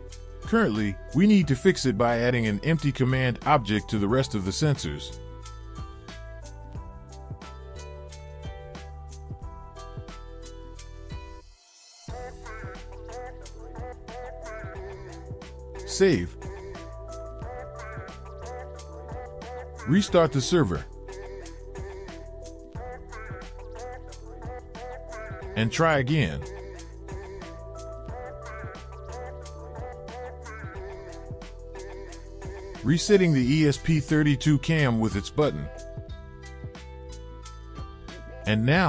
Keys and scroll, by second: 1.0 ctrl+c, 2.9 ctrl+v, 5.9 BackSpace, 8.0 BackSpace, 12.1 ctrl+c, 13.4 ctrl+v, 14.7 ctrl+s, 21.9 ctrl+c, 22.3 ctrl+c, 23.4 Up, 23.7 Return.